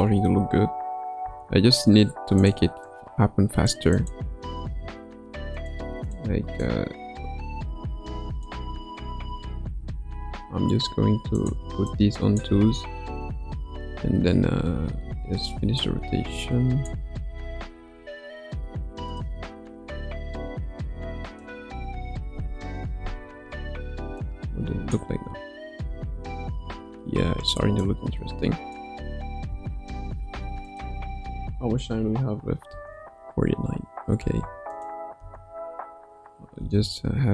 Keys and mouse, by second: 1.2 space, 2.4 click, 2.9-3.7 drag, 3.9 click, 4.7 g, 6.0 click, 6.6-8.4 drag, 8.6 space, 9.1 space, 10.8 g, 11.8 click, 12.5 space, 14.0 space, 15.8-16.9 drag, 19.0 click, 19.6 r, 21.9 a, 22.6 i, 24.2-25.0 drag, 25.1 space, 26.4 space, 27.8-28.7 drag, 30.3 ctrl+s, 30.8 click, 32.7 space, 34.2 space, 34.7 click, 35.1 space, 36.6 space.